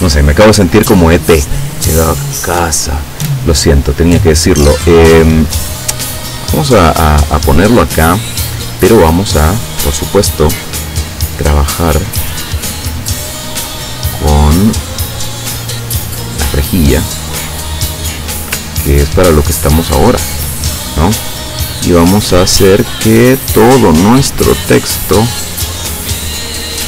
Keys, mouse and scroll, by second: 0.3 click, 4.2-7.8 drag, 9.4 click, 11.9-14.9 drag, 15.4-18.2 drag, 19.8-20.5 ctrl+scroll up 1, 20.5 ctrl+scroll down 1, 22.4-26.7 drag.